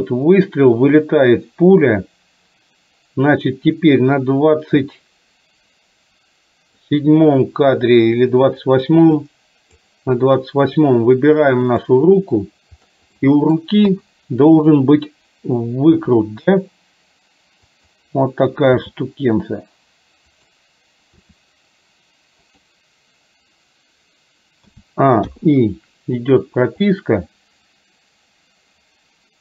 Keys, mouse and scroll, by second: 9.2 click, 11.8 click, 13.3 middle click, 13.9 KP_3, 16.1 r, 18.7 g, 21.3 r, 24.7 a, 25.3 i, 26.8-29.4 drag.